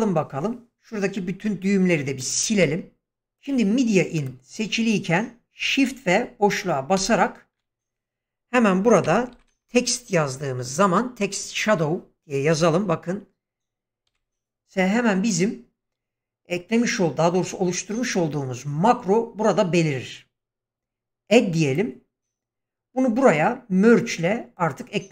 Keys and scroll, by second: 2.5 Delete, 6.9 shift+space, 9.0-9.6 typing, 12.5 t, 14.1 s.